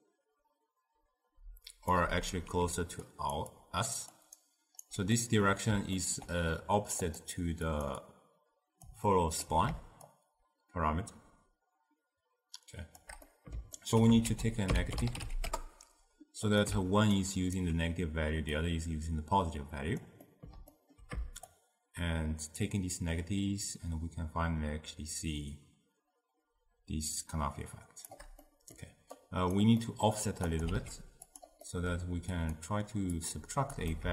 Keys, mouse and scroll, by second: 2.7 d, 3.1 drag, 3.4 d, 3.6 click, 4.1 d, 4.4 right click, 4.9 d, 5.2-7.0 middle drag, 7.0 click, 7.7 click, 8.0-9.1 drag, 9.1 ctrl+middle click, 10.1-13.1 shift+drag, 13.3 middle click, 14.3 ctrl+a, 17.2-18.7 alt+right drag, 18.7-20.3 drag, 20.3-21.5 middle drag, 21.5-24.5 shift+drag, 28.5 middle click, 29.2 click, 29.9-30.5 middle drag, 30.5 click, 30.7 shift+d, 31.7-32.4 middle drag, 32.4-34.0 drag.